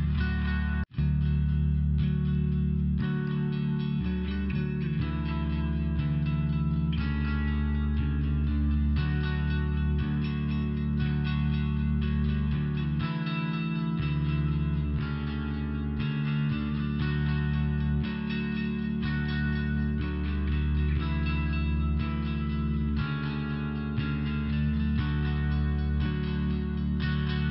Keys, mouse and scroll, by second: 1.3 click, 2.2 click, 4.1 click, 5.1 click, 6.0 click, 6.8 click, 7.2 click, 10.5 click, 15.8 click, 16.1 click, 18.1 click, 19.4 click, 20.4 click, 20.5 click, 21.9 click, 22.6 click, 23.2 click, 23.8 click, 24.4 click, 25.1 click, 25.2 click, 25.5 click, 25.7 click, 26.5 click.